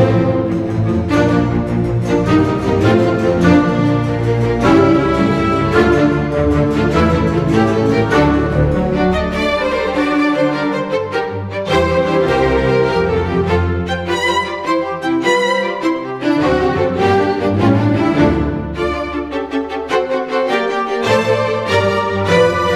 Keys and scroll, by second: 0.8 space, 2.0 space, 2.6 space, 3.3 Delete, 3.6 ctrl+d, 3.8 space, 20.2 Delete, 20.5 ctrl+d, 21.0 1.